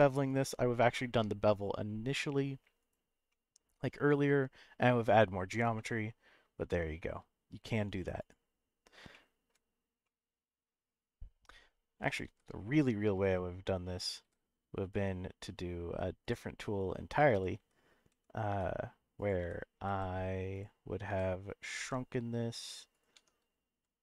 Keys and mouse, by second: 2.8 right click, 3.3 middle click, 5.7 middle click, 7.9 Tab, 9.1-9.5 shift+middle drag, 10.0-10.9 middle drag, 12.3 shift+a, 16.6-17.0 middle drag, 17.3-19.8 typing, 19.1 click, 20.5 click, 21.1 s, 21.7 z, 22.9 right click, 23.1 Tab, 23.8 s.